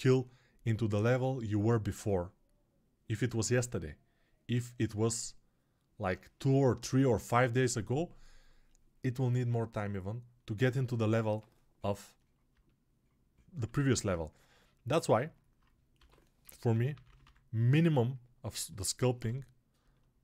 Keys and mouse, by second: 13.7 alt+q, 15.9 g, 16.4 ], 18.4 ].